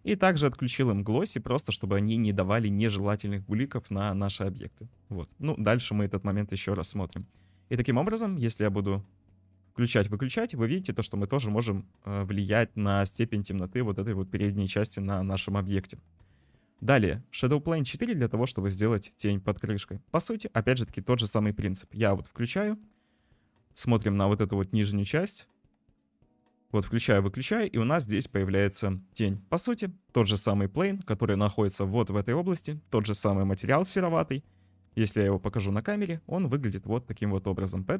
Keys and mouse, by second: 2.1 middle click, 8.1 shift+middle click, 9.5 click, 10.0 click, 11.5 click, 12.8 click, 17.4-18.7 drag, 21.4 click, 26.3 click, 26.8 click, 28.5 click, 30.9 click, 31.7 shift+middle click, 34.6 middle click, 37.7 middle click.